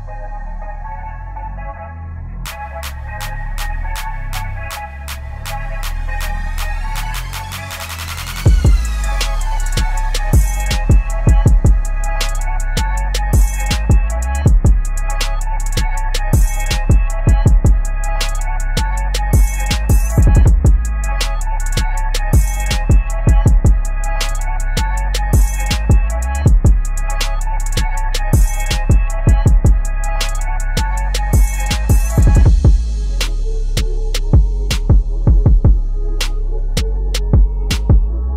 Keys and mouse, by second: 8.5 p, 9.9 click, 12.5 click, 13.0 ctrl+=, 13.4 space, 13.5 click, 13.7 space, 14.3-19.5 drag, 19.7 space, 20.0 a, 20.4-22.7 drag, 22.7 p, 23.1-25.6 drag, 25.6 a, 25.8 click, 26.8 p, 27.0 space, 27.1 click, 27.2 space, 28.4-30.7 drag, 30.7 space, 30.8 click, 31.1 space, 32.0 a, 32.2-33.9 drag, 33.9 p, 34.1 click, 34.4 space, 34.7 click, 35.4 ctrl+z, 35.6 click, 36.0 ctrl+z, 36.3-37.6 drag.